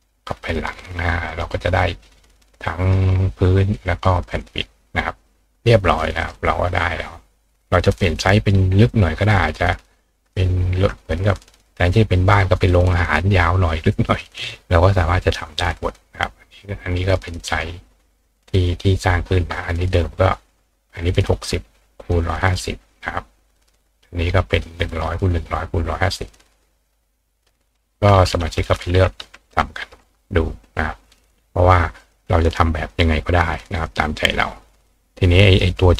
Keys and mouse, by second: 0.4 click, 1.3 click, 1.8-2.9 ctrl+drag, 3.7 click, 4.3 click, 5.9 click, 6.2 right click, 7.9 click, 8.9-10.3 drag, 16.2-17.6 drag, 17.0 right click, 22.0 click, 24.6 click, 26.5 click, 32.0 click, 32.4 click, 32.9 click, 34.9 click.